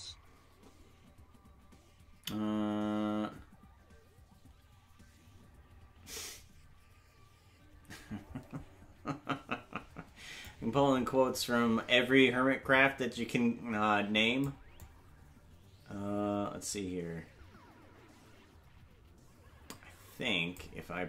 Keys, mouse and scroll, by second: 10.4 click, 14.8 click.